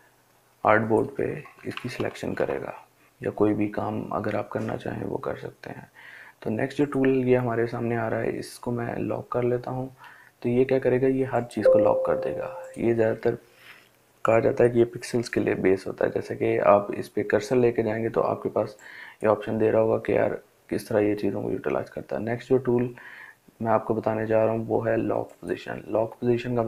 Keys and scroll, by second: 1.4 ctrl+alt+z.